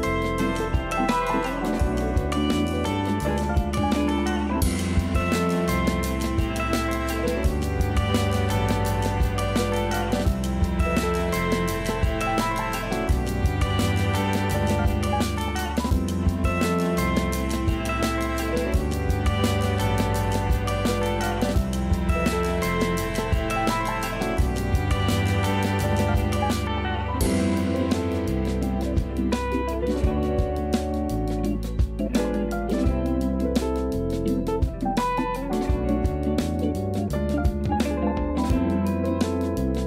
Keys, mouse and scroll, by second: 0.4 a, 0.6 a, 0.8 scroll down 2, 0.9 Tab, 1.3 a, 1.4 a, 2.1-3.0 shift+middle drag, 3.0 shift+a, 6.6-8.4 drag, 8.4-8.9 scroll down 2, 8.9 s, 13.0-13.9 scroll up 5, 13.9-14.3 scroll down 2, 14.3-14.7 middle drag, 15.0-15.7 scroll down 2, 15.7 KP_7, 16.5 g, 17.6 KP_0, 18.3 a, 18.5 a, 18.7-19.3 scroll up 2, 19.3-21.8 scroll up 2, 22.1 click, 23.3 alt+shift+middle click, 24.0-24.6 scroll down 2, 24.6-25.3 shift+middle drag, 25.3-26.3 scroll up 5, 26.3 Tab, 26.9 Tab, 27.2 scroll down 3, 27.8 scroll down 1, 29.6-30.5 shift+middle drag, 30.5-32.4 scroll up 1, 32.4-33.5 scroll up 1, 35.0 click, 36.8 click, 37.5-39.8 drag.